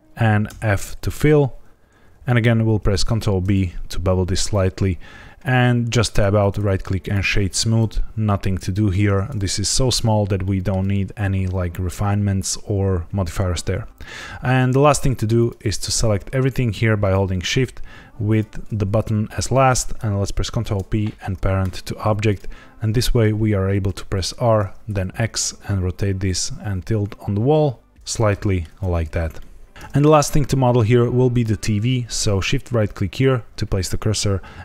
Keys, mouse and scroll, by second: 0.0 click, 0.4 f, 2.7 ctrl+b, 4.4 click, 6.1 Tab, 6.3 right click, 7.3 shift+middle click, 7.6 scroll up 2, 8.9 scroll down 1, 10.4 middle click, 13.0-13.3 scroll down 2, 15.3 click, 15.8 shift+click, 16.9 shift+click, 18.2 shift+click, 20.5 ctrl+p, 22.2 click, 22.9 middle click, 23.8 r, 24.1 y, 24.8 x, 28.0 click, 28.3 shift+middle click, 28.6 scroll down 2, 29.3 shift+middle click, 32.8 shift+right click.